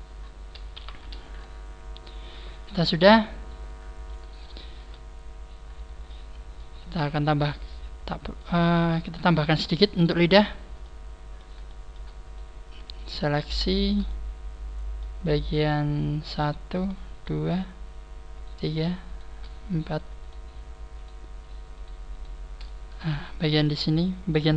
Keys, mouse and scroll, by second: 0.1 scroll up 1, 0.6 scroll up 3, 0.7 Tab, 2.4 middle click, 2.7 scroll down 4, 2.7 KP_3, 2.7 KP_1, 4.5 shift+middle click, 4.9-5.5 scroll up 1, 5.5-5.9 scroll down 1, 5.9 scroll down 1, 6.0 shift+middle click, 6.7 z, 7.2 middle click, 8.6-8.9 scroll up 3, 9.1 Tab, 10.3 scroll up 2, 10.7 middle click, 11.6 shift+middle click, 12.1 right click, 12.7 shift+right click, 13.1 shift+right click, 14.0 middle click, 15.3 shift+middle click, 15.6 shift+middle click, 17.1 shift+middle click, 17.1 shift+right click, 18.3-22.5 shift+right click, 22.5 middle click, 23.8 middle click.